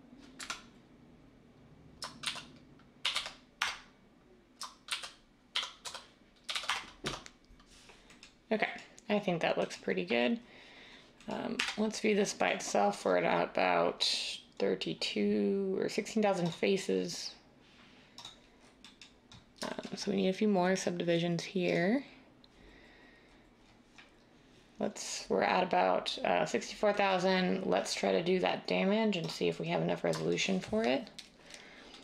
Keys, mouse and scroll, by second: 0.3 Escape, 2.2-3.6 typing, 4.9-6.7 typing, 7.0 Tab, 11.5 typing.